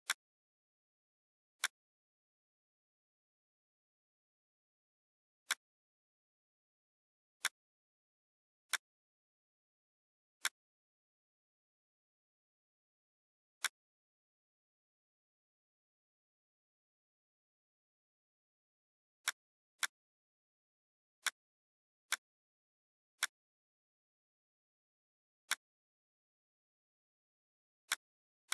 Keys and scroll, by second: 0.8 F4, 6.4 shift+F4, 9.3 F4, 9.8 F2, 26.8 F4.